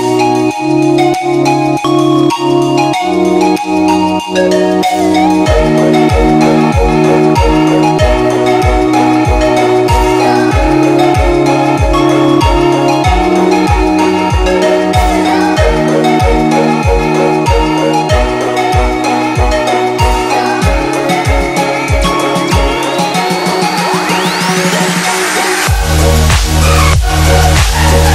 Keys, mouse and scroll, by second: 2.4 ctrl+=, 3.0 space, 3.0 click, 3.3-4.0 space, 4.5 click, 4.7 space, 5.7 click, 6.6 ctrl+=, 7.1-9.0 typing, 7.2 click, 7.7 ctrl+=, 8.4 click, 8.9 click, 9.8-10.9 drag, 11.8 ctrl+-, 12.9 space, 13.1 click, 13.2 space, 13.5 click, 13.6 space, 14.2-14.6 click, 15.3 click, 15.4 click, 16.4 ctrl+-, 17.8 space, 17.9 click, 18.0-19.6 space, 20.1 click, 20.4 space, 21.4 click, 21.9-24.1 alt+drag, 25.4 ctrl+-.